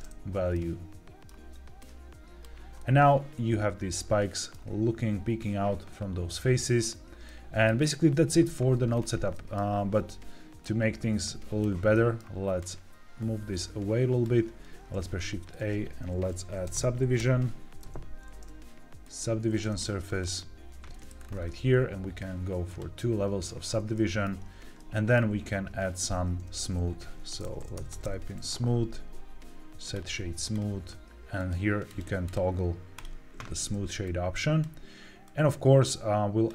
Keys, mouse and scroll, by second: 0.4 middle click, 1.7 click, 2.7-4.4 middle drag, 7.2-8.8 middle drag, 8.8-9.2 scroll down 3, 9.2 middle click, 10.5-11.5 drag, 11.8 middle click, 12.5-14.2 drag, 14.8 shift+a, 21.1-22.6 scroll up 4, 22.6 click, 23.8 shift+middle click, 24.7 middle click, 26.2 shift+a, 27.7 o, 31.3 click, 31.8 click, 32.2 click, 32.9 click, 33.9 click, 35.2-36.4 drag.